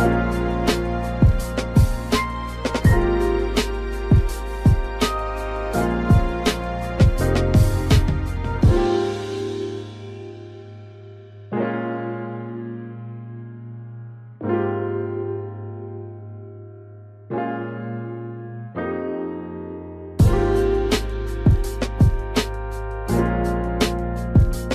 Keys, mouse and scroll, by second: 1.5 ctrl+z, 5.5 typing, 6.9 click, 10.9 ctrl+z, 12.0 ctrl+click, 13.8 ctrl+z, 15.5 typing, 18.3 click, 19.7 ctrl+right click, 21.1 click, 22.6 ctrl+click.